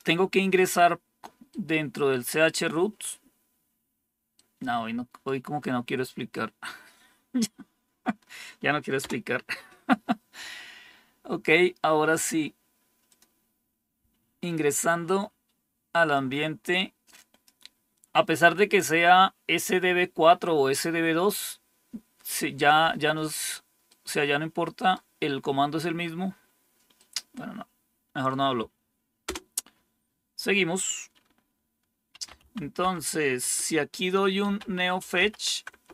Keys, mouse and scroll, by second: 1.4-2.5 right drag, 4.3 right click, 6.2-8.0 right drag, 8.9 Return, 12.0 click, 13.0 click, 16.0-17.4 drag, 23.8-24.9 right drag, 26.9-28.2 right drag, 29.2 Return, 31.8-35.9 typing, 33.3 Return.